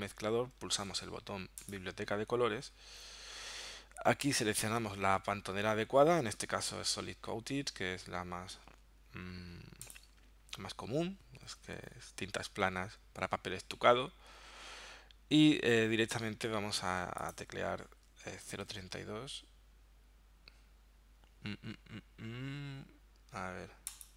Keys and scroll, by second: 18.4-19.2 typing.